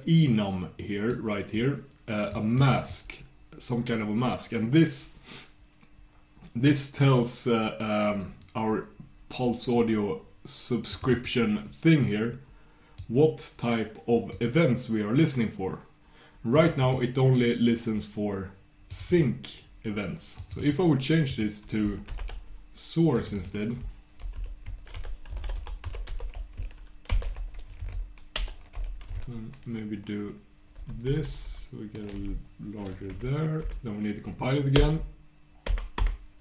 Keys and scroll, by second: 30.8 ctrl+super+h, 31.1 ctrl+super+h, 31.3 ctrl+super+h, 31.5 ctrl+super+h.